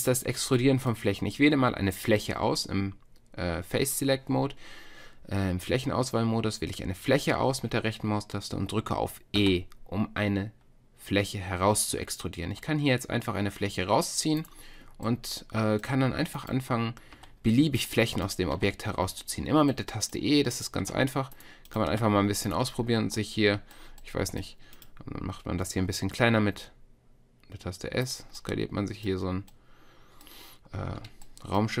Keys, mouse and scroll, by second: 0.0-9.4 middle drag, 9.4 e, 17.1 e, 18.5 e, 20.9 e, 22.0 e, 23.7-24.8 middle drag, 24.8 click, 26.3 s, 28.4-31.8 drag.